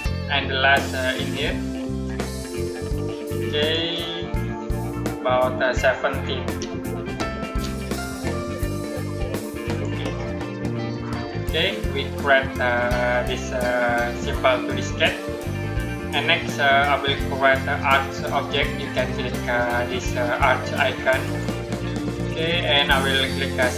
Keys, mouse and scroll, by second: 1.9 click, 6.3-6.9 typing, 9.5 click, 14.0-14.4 scroll up 1, 14.4-17.1 scroll down 1, 21.1 click.